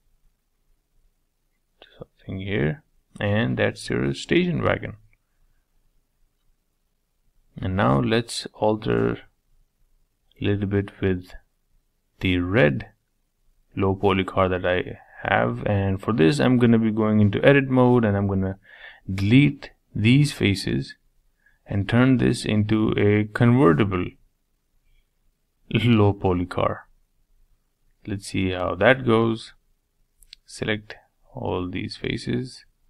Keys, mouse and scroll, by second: 2.6 Tab, 3.0 middle click, 3.5-3.8 scroll down 4, 3.8-10.5 shift+middle drag, 10.5-11.0 scroll up 4, 11.0-12.4 middle drag, 12.4 scroll down 1, 12.5-14.7 middle drag, 14.7 click, 15.2 Tab, 15.6 middle click, 16.3 click, 17.2 3, 17.7 click, 18.4 shift+click, 19.1-20.5 middle drag, 20.5 shift+click, 21.0 shift+click, 21.3 shift+click, 21.7 shift+click, 22.4 shift+click, 22.8 shift+click, 23.4 shift+Left, 24.7 middle click, 25.4 shift+Left, 25.7 shift+Left, 26.6 shift+Left, 27.5 shift+Left, 27.8 middle click, 28.3-28.7 scroll up 3, 28.7 shift+middle click, 29.7 shift+click, 30.0 shift+click, 30.5 shift+click, 30.8 shift+click, 31.1 shift+click, 32.0-32.7 scroll up 3, 32.7 shift+click.